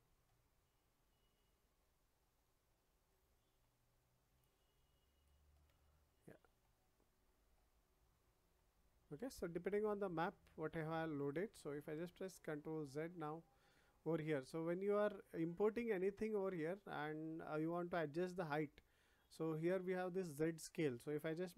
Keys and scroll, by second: 11.9 ctrl+z.